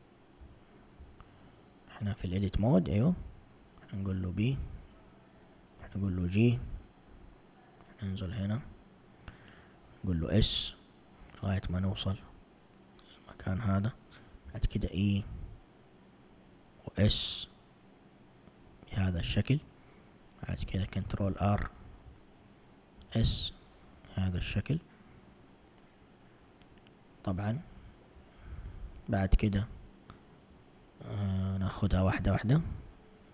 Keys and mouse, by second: 0.5 a, 5.9 b, 5.9 g, 10.3 s, 14.6 e, 17.2 s, 20.9 ctrl+r, 23.1 s, 29.9 alt+click, 31.8 1.